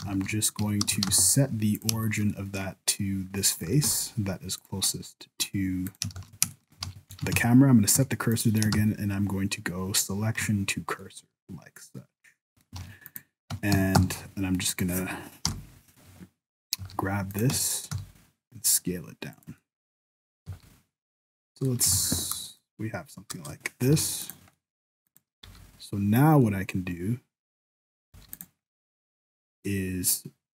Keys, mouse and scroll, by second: 0.0 shift+s, 0.6 Tab, 1.0 ctrl+alt+shift+c, 2.0 shift+middle click, 2.3 scroll up 1, 2.4 middle click, 3.2 scroll down 1, 3.4 middle click, 3.8 g, 4.9 scroll up 1, 5.0 middle click, 5.9 right click, 6.1 shift+s, 6.6 shift+middle click, 6.8 alt+a, 7.1 Tab, 7.3 alt+a, 8.3 Tab, 8.3 right click, 8.7 shift+s, 11.0 middle click, 12.8 alt+a, 13.1 right click, 13.5 Tab, 13.7 a, 14.0 s, 15.4 o, 16.8 s, 17.5 Tab, 17.9 s, 19.6 middle click, 20.4 s, 21.6 middle click, 21.9 alt+a, 22.4 KP_0, 23.3 KP_0, 24.0 alt+a, 24.2 right click, 24.5 middle click, 25.1 right click, 25.4 n, 26.6 middle click, 28.1 n, 28.3 right click, 28.7 middle click.